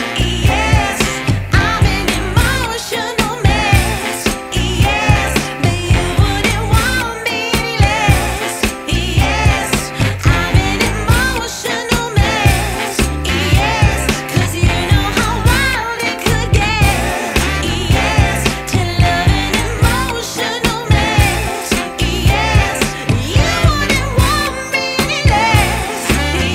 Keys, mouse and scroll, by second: 0.7 r, 4.4 click, 9.5 click, 10.3 click, 11.4 click, 13.2 click, 14.0 click, 16.4 click, 17.4 click, 18.9 click, 19.1 click, 19.3 click, 21.0-22.3 scroll down 3, 23.3 scroll down 1, 23.4 scroll up 1, 23.5-23.9 scroll down 1, 24.7 click.